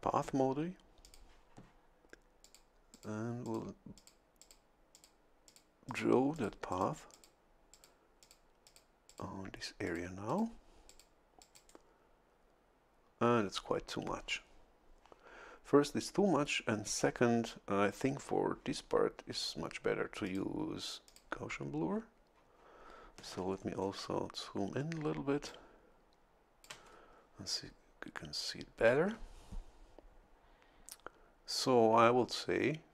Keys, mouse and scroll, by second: 1.0 click, 2.5 click, 3.0 click, 3.5 click, 4.0 click, 4.4 click, 4.9 click, 5.5 click, 5.9 click, 6.4 click, 6.7 click, 7.1 click, 7.7 click, 8.2 click, 8.7 click, 9.1 click, 9.9 click, 10.3 click, 10.9 click, 11.4 click, 11.5 right click, 20.3 click, 21.1 click, 23.4 a, 23.6-25.5 scroll up 1, 25.5-26.9 drag.